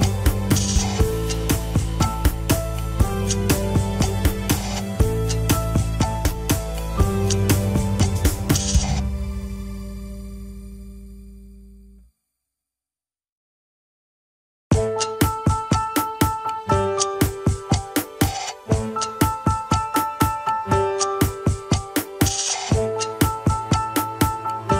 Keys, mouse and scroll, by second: 0.5 ctrl+click, 0.9 Tab, 1.8 click, 2.6 Tab, 5.3 ctrl+click, 5.8 Tab, 6.6 click, 7.3 Tab, 8.3 ctrl+click, 8.8 Tab, 9.4 click, 10.1 Tab, 11.0 ctrl+click, 11.7 Tab, 12.4 click, 13.0 Tab, 14.1 ctrl+click, 14.6 Tab, 15.4 click, 16.2 Tab, 17.1 ctrl+click, 17.5 Tab, 18.1 click, 18.7 Tab, 18.8 scroll down 1, 19.9 ctrl+s, 20.0 click, 20.4 scroll up 1, 21.2 ctrl+Tab, 21.5 click, 22.6 g, 24.3 scroll down 3, 24.4-24.7 middle drag.